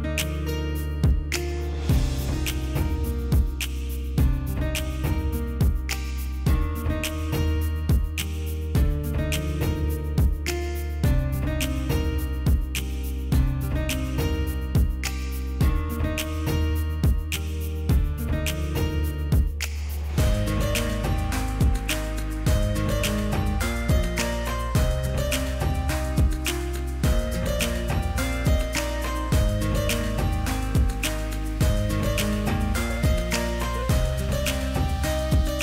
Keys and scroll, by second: 2.6 space, 24.5 space.